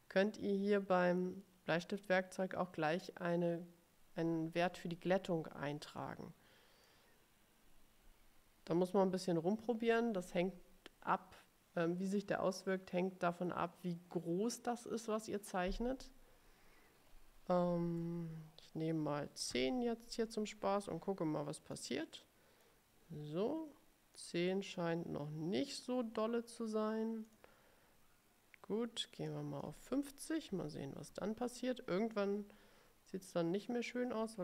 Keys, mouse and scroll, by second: 6.3 click, 18.2 BackSpace, 19.3-20.2 typing, 21.8-23.0 drag, 24.3 click, 27.4 click, 29.5 click, 30.8 5, 31.3 0, 32.5 scroll down 2, 33.4 click.